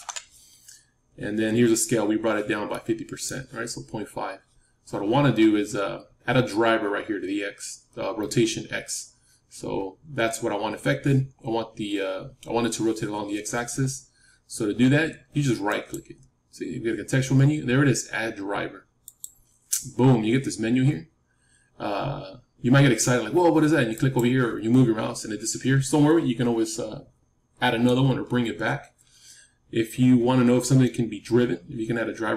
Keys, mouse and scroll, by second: 2.6-4.7 middle drag, 11.2-12.0 scroll down 1, 12.0-13.2 scroll down 1, 15.6-19.6 right drag, 23.8-28.4 drag.